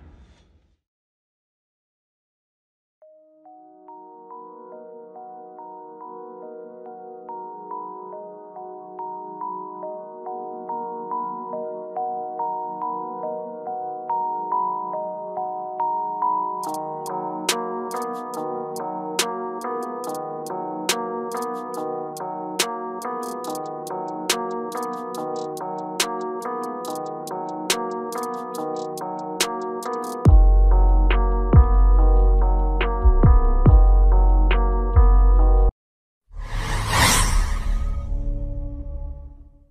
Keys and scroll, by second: 2.7 F4, 32.0 F4.